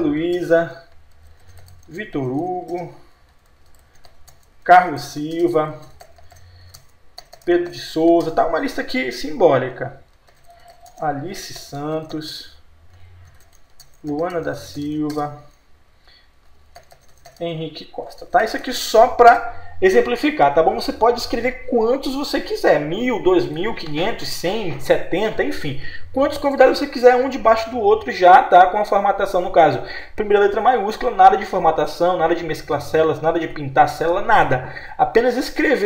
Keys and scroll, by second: 0.3 Return, 12.3 Return, 19.3 Return.